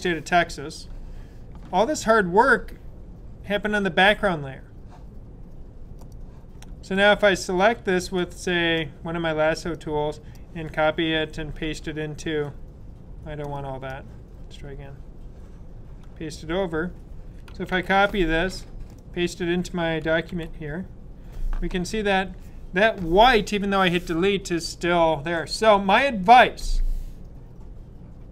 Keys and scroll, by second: 17.6 super+c, 20.2 super+v.